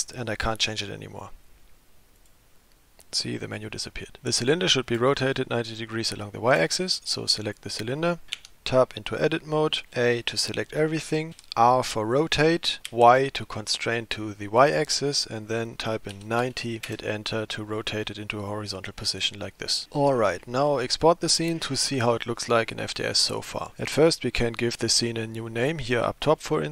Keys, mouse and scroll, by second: 2.2 click, 7.5 click, 8.4 Tab, 9.9 a, 11.4 r, 18.3 middle click, 19.5-19.8 scroll up 1, 26.3-26.7 drag.